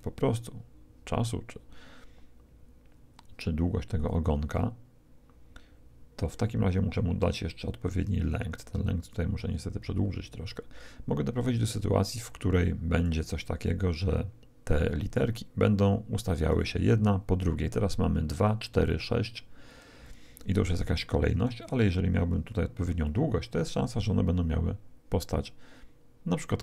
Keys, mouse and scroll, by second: 9.1-11.0 drag, 13.7-15.5 drag, 18.5-21.7 drag, 23.0-24.7 drag, 24.7 click.